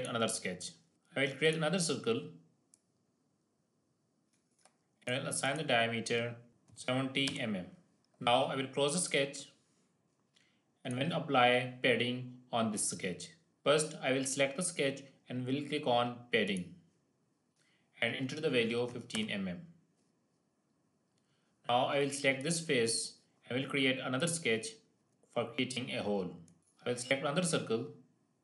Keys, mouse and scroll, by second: 1.3-4.3 drag, 8.9 click, 16.9 click, 20.5-20.9 scroll up 2, 20.9-22.3 scroll down 2, 22.5 click, 24.5 click, 26.4 shift+middle click, 26.6 click.